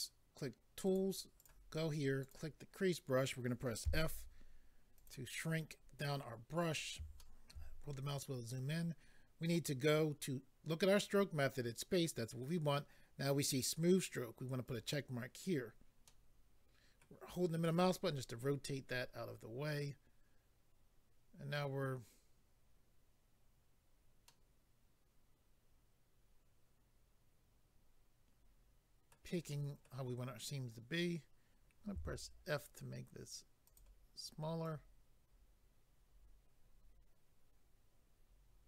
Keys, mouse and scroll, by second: 0.8 click, 1.0 click, 1.4 click, 1.5 double click, 2.2 double click, 2.3 double click, 4.9 click, 4.9 f, 5.4-5.8 scroll up 4, 6.1 scroll down 1, 6.2-6.5 scroll down 1, 6.7-7.2 scroll down 2, 7.2 shift+middle click, 7.7 scroll up 3, 14.7 click, 14.8 click, 15.5-16.0 scroll down 1, 16.1 middle click, 24.3 middle click, 29.5 middle click, 33.6 click, 33.8 click, 34.6 click.